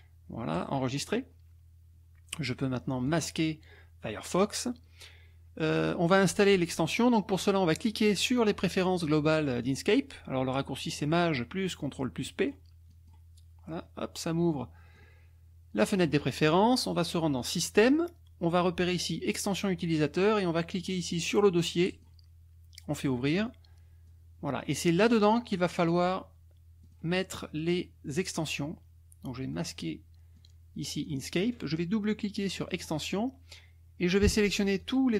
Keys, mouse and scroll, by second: 0.5 click, 3.1 click, 12.3 click, 12.9 click, 15.0-16.2 drag, 17.4 click, 21.9 click, 24.0 click, 26.8 click, 29.5 click, 30.4 click, 32.6 click, 34.8 click.